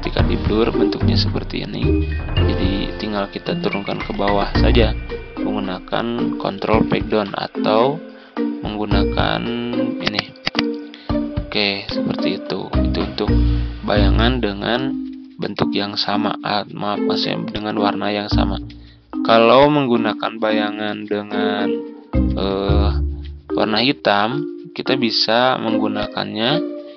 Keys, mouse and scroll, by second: 1.6-2.1 ctrl+scroll up 1, 3.4 ctrl+Page_Down, 3.8 ctrl+Page_Down, 4.1 ctrl+Page_Down, 4.3 ctrl+Page_Down, 6.5 ctrl+Page_Down, 6.8 ctrl+Page_Down, 10.0-11.6 drag, 13.9 Right, 14.1-14.8 typing, 17.4 click, 18.4 ctrl+scroll down 1, 19.4 click, 20.7 ctrl+z, 20.9 ctrl+z, 21.2 ctrl+z, 21.6-22.6 typing, 23.4-25.5 drag, 26.6 ctrl+scroll down 1.